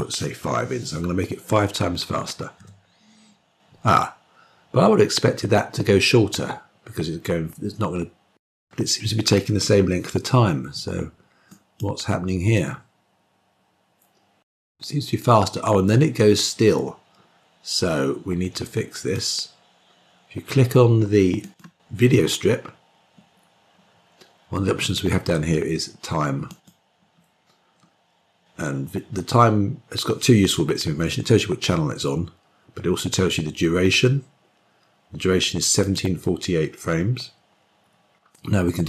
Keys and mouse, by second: 12.6-19.0 drag, 21.3 click, 26.3 click, 35.8-38.8 drag.